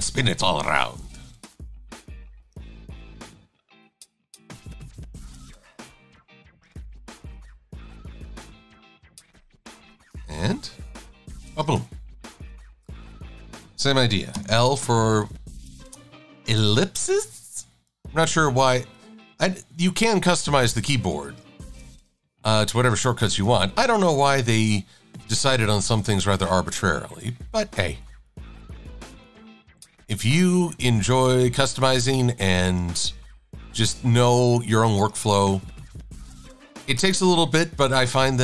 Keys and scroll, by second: 7.0 shift+x.